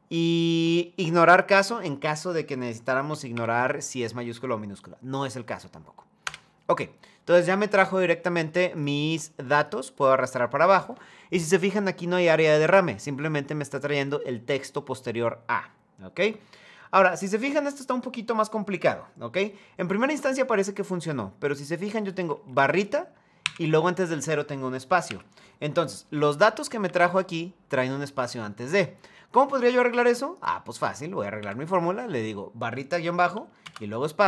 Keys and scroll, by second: 5.9 Return, 22.2 Right, 23.1 Right, 24.8 Left, 25.7 Return, 26.2 Right, 26.5 Up, 31.1 Right, 34.0 Return.